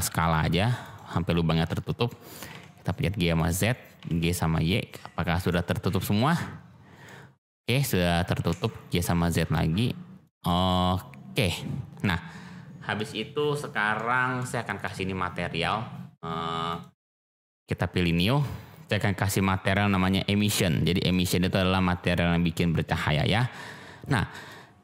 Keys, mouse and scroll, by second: 0.8 click, 1.1-2.0 middle drag, 2.3 g, 2.4 z, 3.3 drag, 3.9 g, 4.1 y, 5.3 click, 5.6-6.9 middle drag, 7.1-7.8 drag, 8.3 g, 8.4 z, 10.2 click, 10.7-12.9 drag, 13.9-14.3 middle drag, 14.7 click, 16.6 click, 18.2-21.2 drag, 23.4-24.4 middle drag.